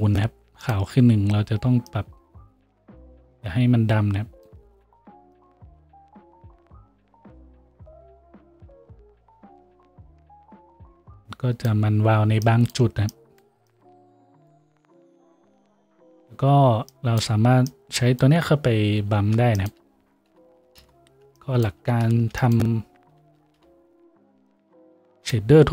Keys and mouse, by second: 19.1-22.1 shift+drag, 19.2 shift+a, 22.1-25.7 shift+middle drag, 22.2 shift+a.